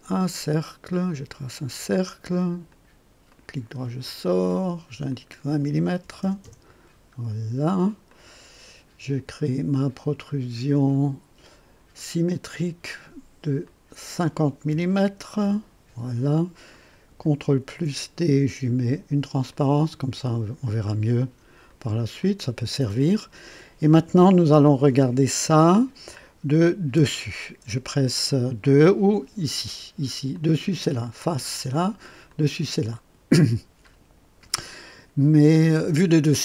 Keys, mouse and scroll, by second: 1.6 click, 2.7 click, 3.2 right click, 4.0 click, 5.1 click, 6.0 KP_2, 6.2 KP_0, 6.4 KP_Enter, 8.0 click, 10.2 click, 11.9 click, 13.6 click, 14.7 KP_5, 15.4 KP_Enter, 16.7 click, 17.6 ctrl+d, 19.4-20.8 drag, 21.6 click, 22.2 click, 22.8-23.4 drag, 26.9 2, 30.3 click, 31.3 click, 32.2 click.